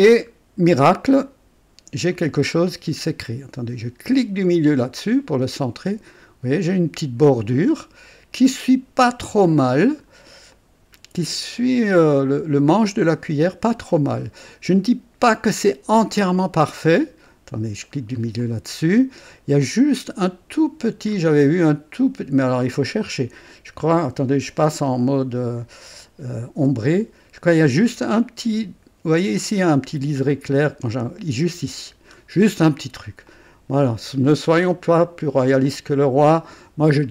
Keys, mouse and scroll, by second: 0.2 scroll up 2, 0.8-2.3 drag, 2.6 scroll up 2, 4.5 middle click, 5.0-10.3 drag, 10.5-13.5 drag, 13.0 right click, 13.9 click, 14.8 right click, 16.1 click, 17.8 middle click, 18.4 click, 19.6 click, 21.1 scroll up 2, 21.6 click, 22.7 right click, 26.3 v, 26.6 KP_6, 29.6-30.5 scroll up 2, 32.1-32.8 scroll down 2, 33.3 click, 34.0-34.3 scroll down 2, 34.6 right click, 35.7-37.1 drag.